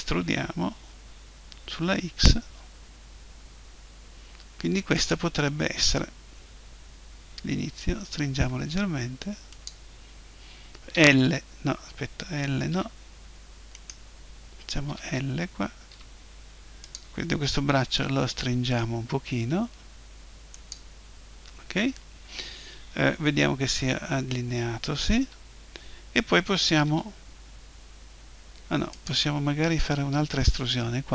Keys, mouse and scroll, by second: 5.1-7.1 drag, 8.3 s, 9.7-10.9 drag, 10.9 l, 12.7 a, 13.7-15.5 drag, 14.9 l, 15.5 middle click, 15.9 g, 16.9-18.7 drag, 17.9 s, 20.7-22.7 drag, 23.3 KP_7, 25.2 KP_1, 26.9 g, 29.1-30.8 drag.